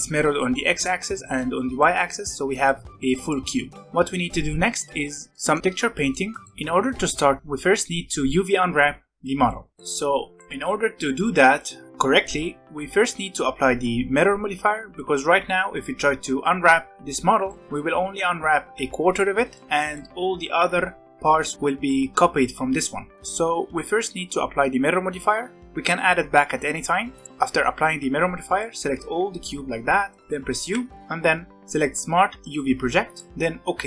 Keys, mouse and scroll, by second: 1.1-2.2 middle drag, 2.2 Tab, 2.6-3.9 middle drag, 3.9 click, 5.0 scroll up 1, 5.3-13.3 middle drag, 14.9 middle click, 15.2 a, 17.4-21.5 middle drag, 23.9 Tab, 27.1 click, 27.2-30.6 middle drag, 30.6 u.